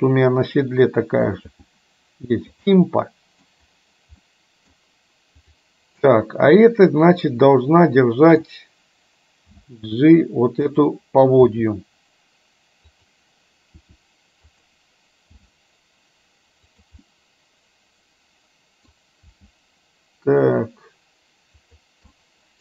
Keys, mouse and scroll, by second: 0.0-1.3 middle drag, 1.7 g, 2.7-3.5 middle drag, 4.3 middle click, 6.2-8.5 middle drag, 9.5 g, 11.5 r, 13.9 r, 15.4 g, 17.2-19.0 middle drag, 19.3 g, 22.2 middle click.